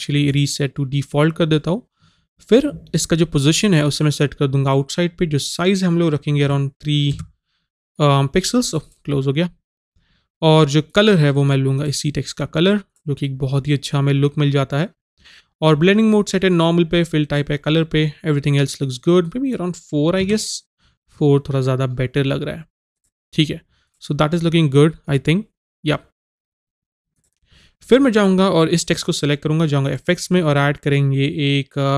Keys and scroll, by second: 6.5 KP_3, 20.2 KP_4.